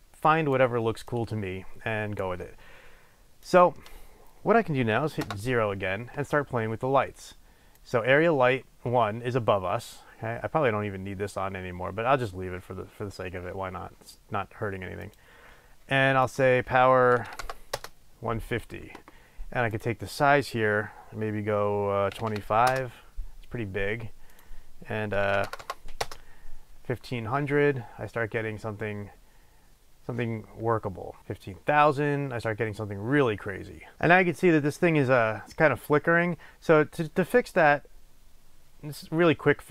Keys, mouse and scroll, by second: 5.4 KP_0, 7.9 click, 15.2 click, 16.4-33.9 drag, 18.0 Return, 23.0 Return, 25.8 KP_0, 26.3 Return.